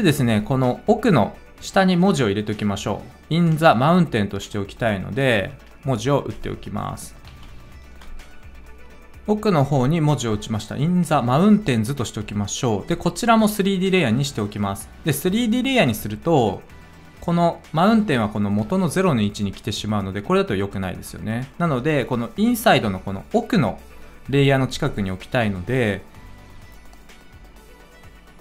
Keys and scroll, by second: 7.3 ctrl+v.